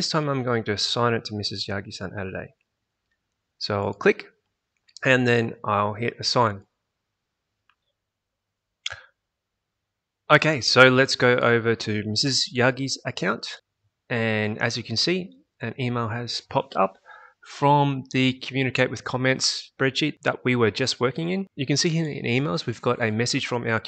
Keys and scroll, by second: 13.0 alt+Tab.